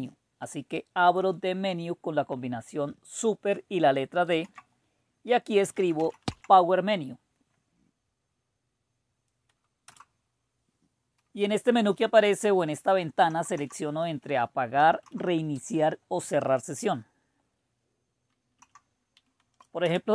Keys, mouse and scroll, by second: 4.2 super+d, 5.4-6.7 typing, 9.8 Return, 13.2 End, 13.5 Down, 14.7 Up, 15.0 Up, 18.6 Down, 19.8 Return.